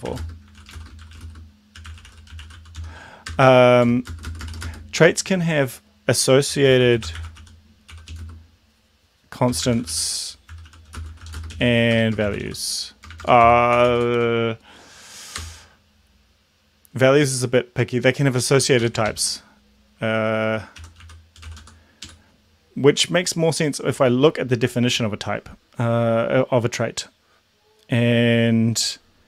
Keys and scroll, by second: 0.0-4.7 typing, 3.4 Return, 6.4-14.7 typing, 15.5 Return, 18.7 Up, 18.9 End, 19.2 ctrl+shift+Left, 20.6-22.1 typing.